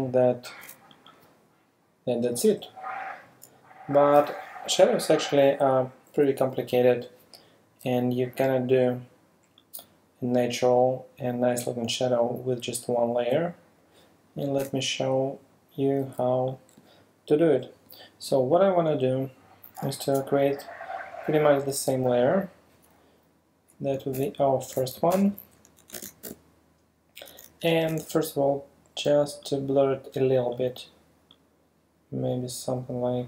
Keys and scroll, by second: 14.6 BackSpace, 19.9 super+space, 24.1 super+BackSpace, 25.0 alt+super+BackSpace, 25.9 alt+super+d, 26.3 super+v, 27.1 v, 27.9 super+b.